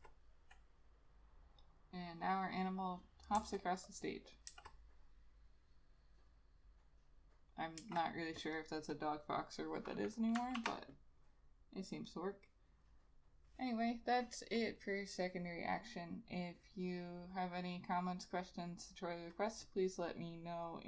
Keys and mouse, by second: 0.0 Return, 3.5 Return, 4.6 Return, 7.9 Return, 10.7 ctrl+s.